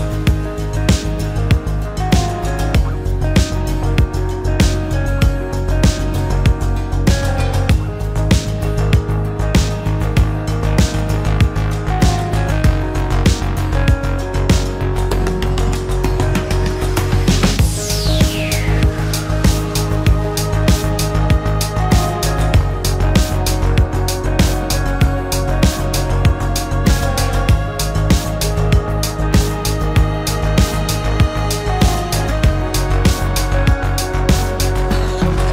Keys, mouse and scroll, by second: 2.7 space, 3.8 shift+click, 4.5 shift+click, 5.0 shift+click, 12.0-12.7 typing, 14.6 shift+middle click, 14.7 shift+middle click, 15.0 space, 15.0 Escape, 19.1 Delete, 26.4 shift+middle click, 27.9 space, 28.6 shift+middle click.